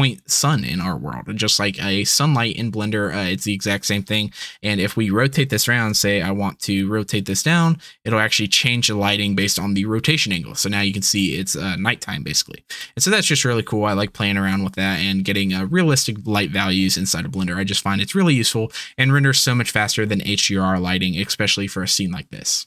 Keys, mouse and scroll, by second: 0.8-9.0 middle drag, 5.9 r.